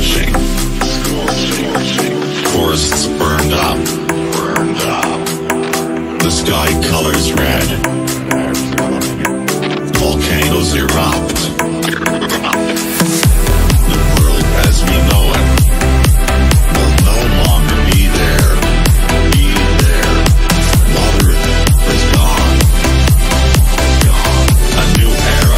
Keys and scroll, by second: 7.2 Down, 14.7 F3, 19.6 Right.